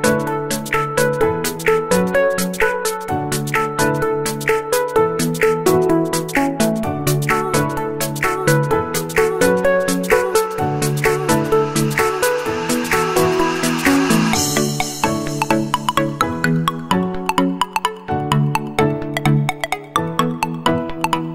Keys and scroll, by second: 13.3 b, 13.6 g.